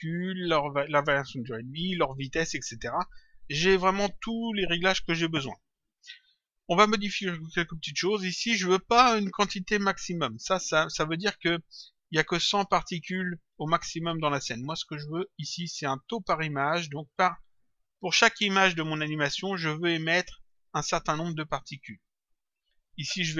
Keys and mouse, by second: 11.5 click, 15.0 click, 16.7 click, 20.3 click.